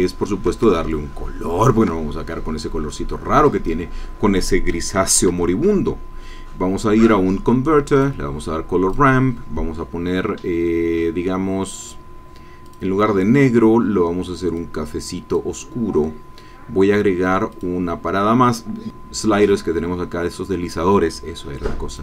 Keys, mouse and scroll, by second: 0.6-2.0 ctrl+shift+drag, 2.3-2.7 ctrl+scroll up 1, 2.9 click, 5.1 shift+a, 7.9 click, 8.9-10.3 drag, 11.8 click, 12.6 click, 13.4-14.0 scroll up 2, 14.0-14.5 scroll up 1, 14.5-15.5 drag, 17.5 click, 21.9 click.